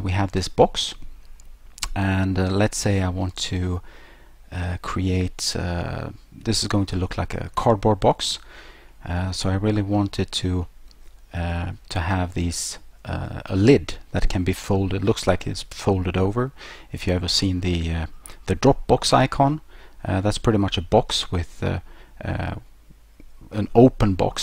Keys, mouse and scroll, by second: 1.4 middle click, 2.0 middle click, 2.0-2.7 scroll up 1, 2.7 scroll down 1, 2.8 scroll down 1, 3.6 middle click, 8.9 middle click, 10.6 middle click, 15.2 middle click, 15.2-16.1 scroll, 19.4 middle click.